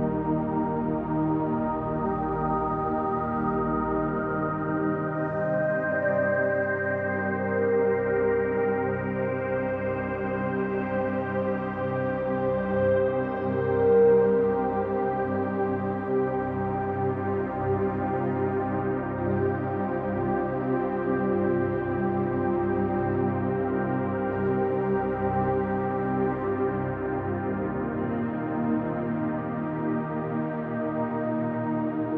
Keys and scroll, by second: 4.7 ctrl+alt+space, 6.1 ctrl+Return, 17.2 ctrl+space.